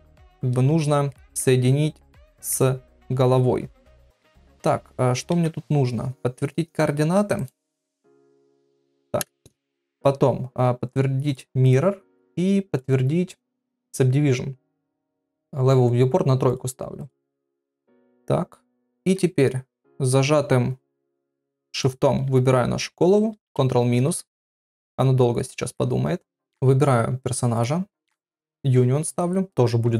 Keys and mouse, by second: 1.1 ctrl+middle click, 2.0 middle click, 4.0 shift+middle click, 5.3 ctrl+a, 7.3-8.5 right drag, 11.3 click, 12.8 click, 16.5 click, 18.0-19.0 middle drag, 21.8 shift+click, 27.5 click.